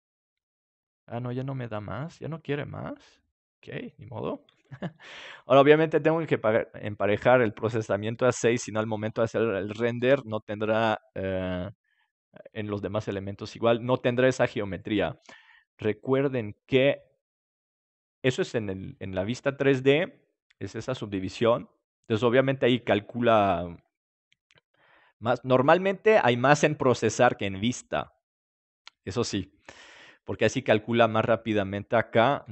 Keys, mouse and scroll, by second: 4.7-6.8 middle drag, 7.1-9.9 drag, 9.9 ctrl+s, 12.3 click, 12.3 right click, 13.7-15.4 drag, 14.7 right click, 16.5-18.2 drag, 16.5 right click, 32.4 ctrl+s.